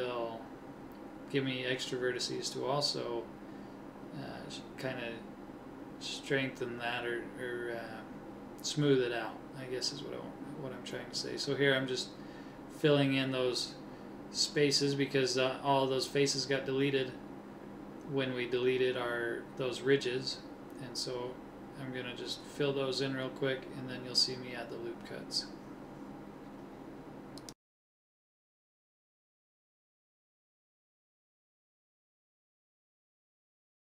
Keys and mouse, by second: 3.5 middle click, 5.5-6.8 middle drag, 6.8-7.9 drag, 7.9 f, 8.4 click, 9.3 f, 9.8 click, 11.1 f, 11.5-12.9 drag, 14.6-17.2 middle drag, 17.2 ctrl+Tab, 21.0 f, 22.4 f, 24.2 f, 24.4 click, 25.1 click, 25.2 click, 25.6 middle click, 27.2 right click, 28.2 f, 29.3 f, 30.6 f, 31.2 middle click, 33.0 f.